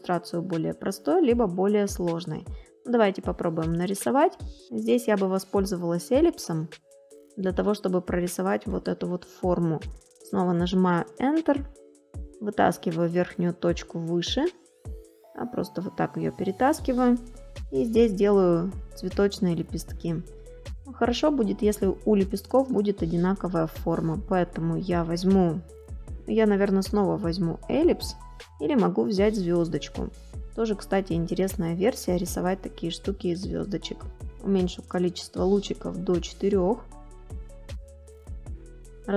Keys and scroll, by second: 0.8 space, 4.7 space, 6.7 space.